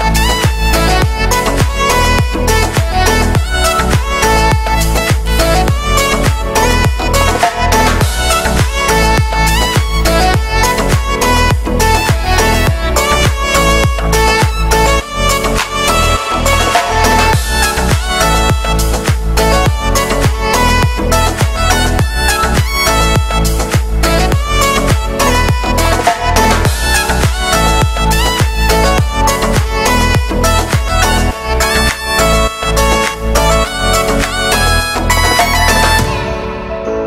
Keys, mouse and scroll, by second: 0.4-3.0 shift+right drag, 3.0 shift+middle click, 3.3-4.1 scroll up 3, 4.1 e, 6.7-8.0 scroll down 2, 6.8 shift+middle click, 8.0-12.1 drag, 12.1 scroll down 3, 12.2 shift+middle click, 12.8 s, 13.9 Tab, 14.1 middle click, 15.2 right click, 15.4 Tab, 15.7 shift+middle click, 16.2-16.7 scroll up 4, 16.7 right click, 16.9 middle click, 17.4 shift+right click, 17.6-18.6 middle drag, 18.6 shift+s, 19.6 shift+middle click, 20.2 shift+a, 20.9 middle click, 21.5-23.0 drag, 24.0 shift+middle click, 24.3-24.6 scroll up 4, 24.6 s, 24.8 s, 26.4 shift+middle click, 26.7-27.4 scroll up 4, 27.4 click, 27.7 right click, 28.3 shift+middle click, 28.7-29.2 scroll down 2, 29.2 e, 32.0 shift+middle click, 32.5 g, 33.6 g, 34.0 middle click, 34.7 e, 35.5 middle click, 35.8 scroll down 2, 35.9 s.